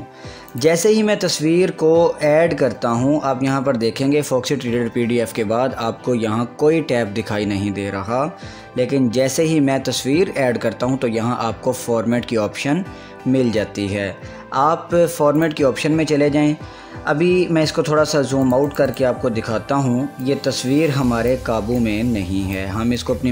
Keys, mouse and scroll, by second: 0.7 click, 2.4 ctrl+x, 8.9 ctrl+z, 15.6 click, 18.7-23.3 drag.